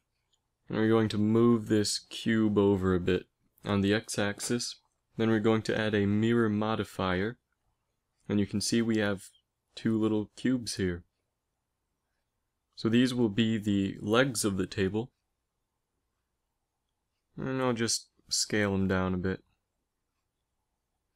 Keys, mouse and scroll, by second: 0.3 KP_1, 2.2 KP_5, 3.0 g, 10.7 g, 11.9 s, 15.3 s, 17.8 s, 19.1 s.